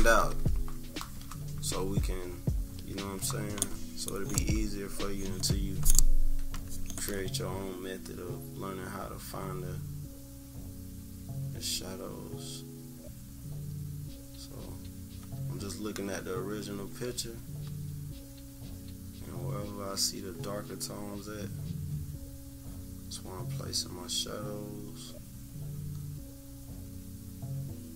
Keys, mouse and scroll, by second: 1.2 -, 1.7 =, 1.9 scroll down 1, 2.0 =, 2.2-2.8 scroll up 4, 2.2 =, 2.9-6.3 scroll down 2, 6.5 click, 8.6-27.9 drag.